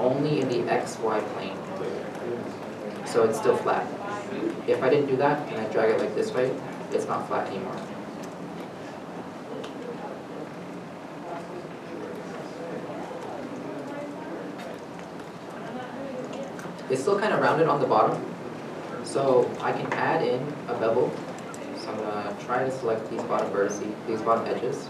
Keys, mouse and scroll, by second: 2.8 shift+z, 6.6 middle click, 8.6 ctrl+z, 9.2 middle click, 9.8 Tab, 14.0 Tab, 14.6 middle click, 18.6 scroll, 18.7 middle click, 18.9 Tab, 19.5 middle click, 19.6-20.1 scroll down 1, 20.1 scroll up 1, 20.5 3, 20.7 2, 21.6 alt+click, 22.6 middle click, 23.5 middle click, 23.5 shift+click.